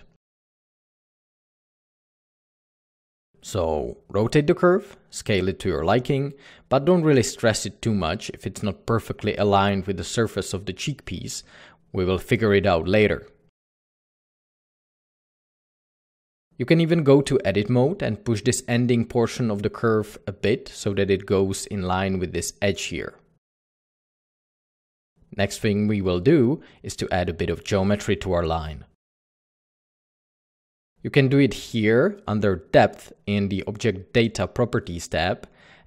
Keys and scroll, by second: 1.2 r, 2.8 z, 2.8 s, 3.9 g, 9.4 typing, 12.5-14.1 typing, 15.7-16.3 typing, 17.6 Tab, 18.1 typing, 20.4 Escape, 21.8-22.8 typing, 23.8 Escape, 27.3-28.1 typing.